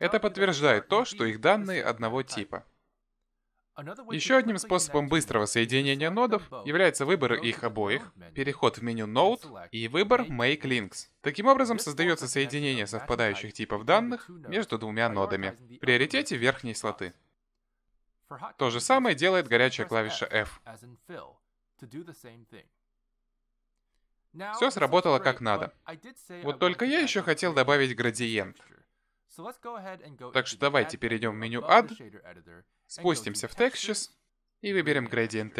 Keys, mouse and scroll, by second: 6.4 click, 7.4 click, 8.1 shift+click, 9.5 click, 18.2 click, 19.7 click, 20.2 shift+click, 21.2 f, 29.9-30.8 scroll down 7, 30.8 middle click, 32.5 click.